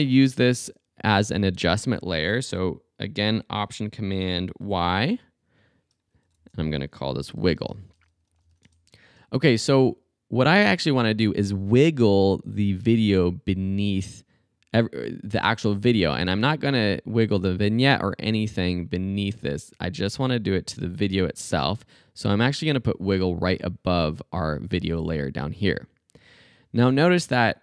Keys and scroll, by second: 4.6 alt+super+y, 6.4 Return, 7.1-9.0 typing.